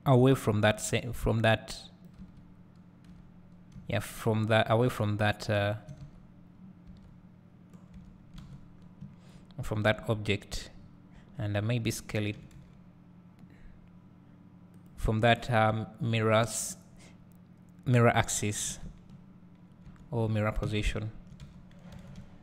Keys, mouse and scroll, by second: 2.4 Tab, 3.2 Tab, 3.4-4.7 drag, 4.1 `, 7.0 Tab, 8.5 alt+a, 9.3-15.0 drag, 10.3 scroll up 1, 11.4 Tab, 12.6 s, 15.9-22.4 drag, 19.1 Tab, 19.5-20.0 scroll down 2, 20.0 Tab, 20.2 scroll down 2, 20.8 a, 21.0 `, 22.2 `.